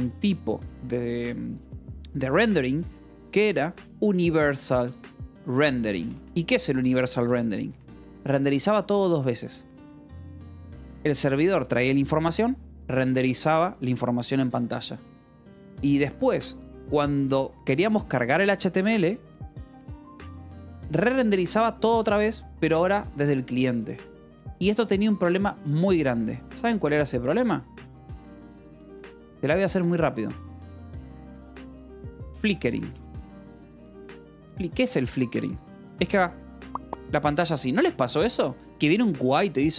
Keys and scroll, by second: 3.0-7.1 typing, 7.5 Escape, 26.1 Return, 26.6-29.2 typing, 27.2 Escape, 31.8-35.5 typing.